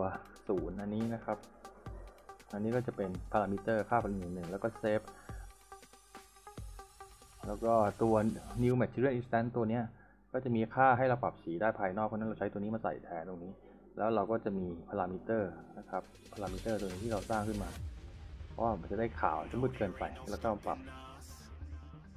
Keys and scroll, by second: 13.3 s.